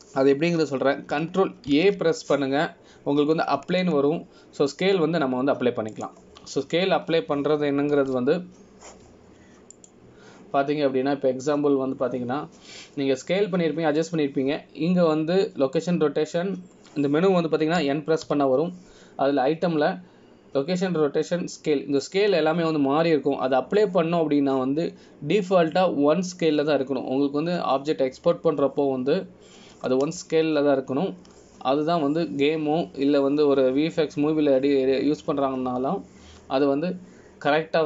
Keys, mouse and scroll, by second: 3.9 ctrl+a, 11.9 click, 20.4 n.